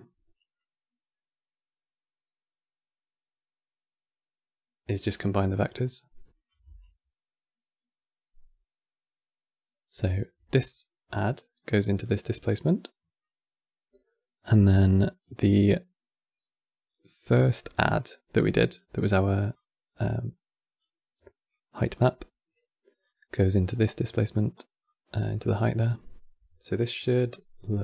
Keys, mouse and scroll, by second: 6.5-9.6 alt+drag, 10.8 click, 14.3 click, 17.6-19.3 drag, 21.6-23.3 drag, 23.3 scroll up 9, 23.8-24.5 middle drag, 24.5 click.